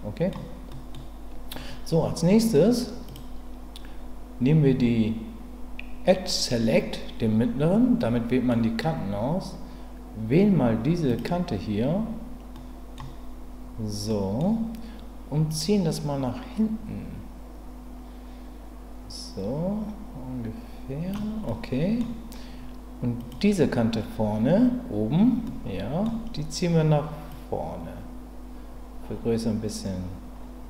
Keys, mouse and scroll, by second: 0.7 middle click, 3.0 click, 8.0 middle click, 12.5 middle click, 14.1 middle click, 15.5-21.1 drag, 21.5 middle click, 25.4 middle click, 27.3-30.6 drag.